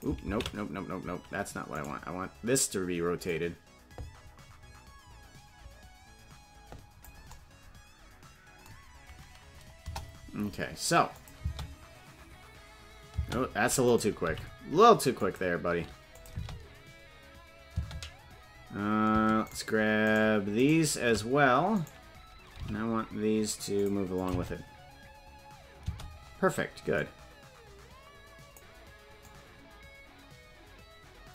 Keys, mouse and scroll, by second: 1.8 right click, 3.2-7.1 drag, 9.7 KP_0, 11.1 click, 11.3 space, 13.8 right click, 13.8 space, 14.2 g, 16.1 click, 16.3 space, 19.5 shift+space, 20.2 shift+right click, 21.7 right click, 22.5 g, 24.1 click, 24.3 space, 27.0-28.6 drag, 27.0 space, 29.2-31.3 drag.